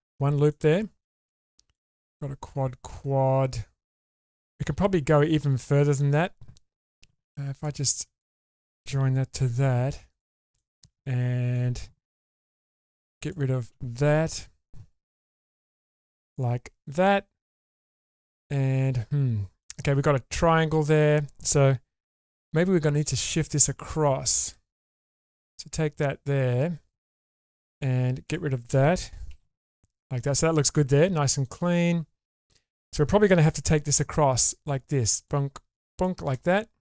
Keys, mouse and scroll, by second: 0.3 scroll up 1, 0.5-1.7 middle drag, 3.0-4.6 middle drag, 7.1 1, 7.5 click, 8.2 shift+click, 9.4 m, 10.1 click, 10.6 middle click, 12.4 2, 13.2 alt+click, 15.4 ctrl+x, 15.9-17.0 middle drag, 17.3 scroll down 2, 17.5-19.7 middle drag, 20.0-20.4 scroll up 2, 22.0 k, 25.2 click, 27.8 click, 28.2 shift+click, 29.3 ctrl+x, 29.7 middle click, 31.4-32.4 middle drag, 33.6 k.